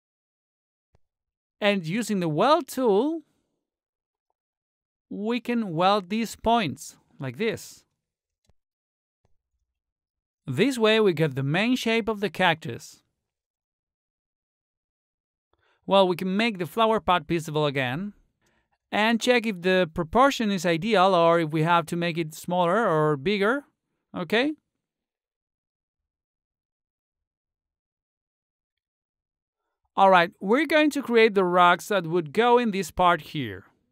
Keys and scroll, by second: 27.2 t, 28.1 t, 28.5 e.